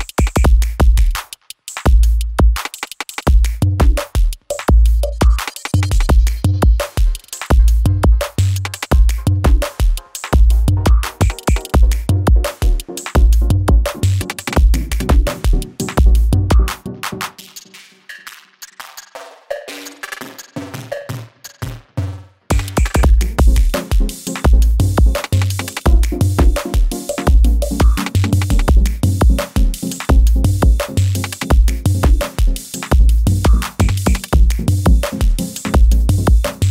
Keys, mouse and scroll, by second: 0.8-1.5 drag, 2.2 space, 5.5 click, 5.7 u, 8.1 click, 9.4 Return, 10.5-11.4 drag, 19.5 k, 20.2 click, 22.7 Return, 23.2 space, 25.8-26.4 click, 28.0-28.4 scroll up 1, 28.4 click, 28.9 ctrl+c, 29.8 click, 30.5-31.1 scroll down 1, 32.5 shift+click, 33.8 click, 34.6-36.3 typing.